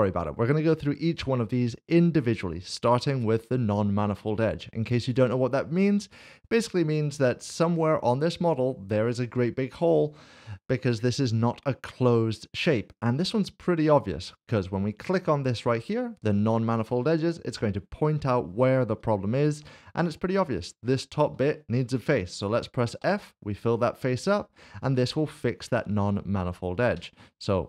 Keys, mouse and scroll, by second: 5.2 click, 7.6 middle click, 17.1 click, 19.1 shift+middle click, 23.7 f, 23.9 middle click, 24.8 shift+middle click, 26.9 Tab.